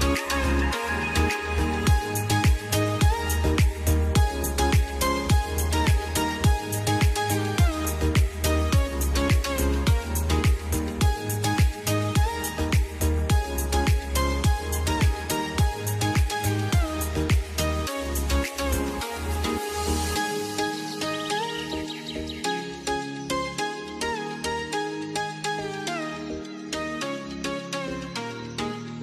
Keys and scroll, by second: 4.3 F2, 11.4 F2.